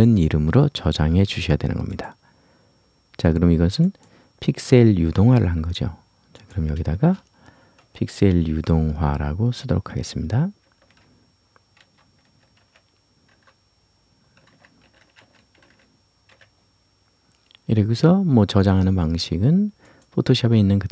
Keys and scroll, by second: 6.9 space.